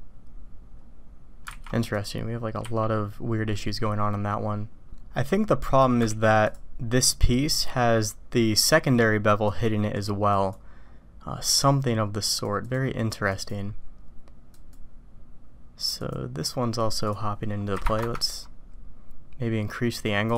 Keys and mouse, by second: 1.7 alt+v, 2.6 q, 3.5 middle click, 5.6 middle click, 6.2 alt+v, 9.6 click, 12.4-13.0 drag, 13.4 click, 14.8-16.1 drag, 17.2-19.1 drag.